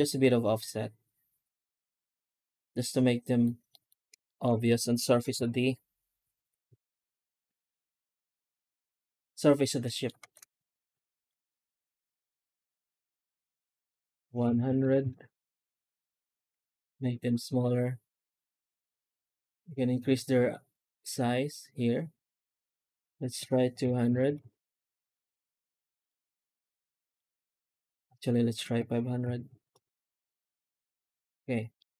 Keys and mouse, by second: 3.6 middle drag, 4.1 shift+middle drag, 5.2 F9, 9.5 middle click, 10.0 alt+shift+z, 10.9 shift+middle click, 11.5 F9, 14.7 KP_0, 24.1 KP_0, 25.9 middle click, 26.7 shift+middle click, 27.5 F9, 29.5 KP_0, 31.6-31.9 middle drag.